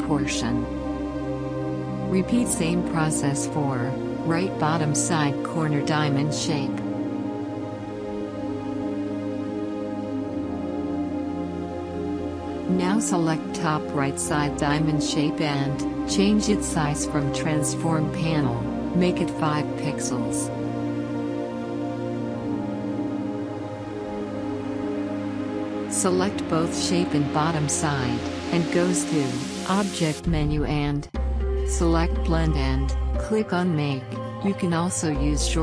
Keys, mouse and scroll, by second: 3.0 Return, 4.2-6.4 drag, 7.7 ctrl+a, 10.0 click, 12.2-15.3 drag, 16.6 a, 18.3 Tab, 20.0-24.0 drag, 25.4 ctrl+a, 29.2-32.0 drag, 34.8 click.